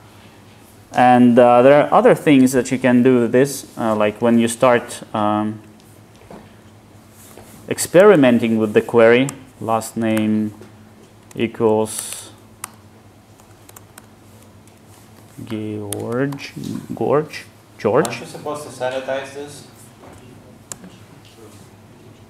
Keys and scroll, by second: 18.1 alt+Return.